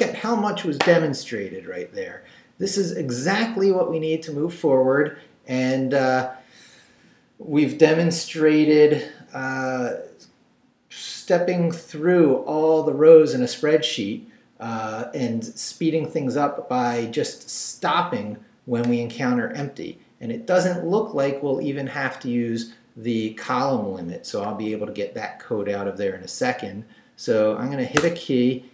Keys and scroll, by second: 28.0 space.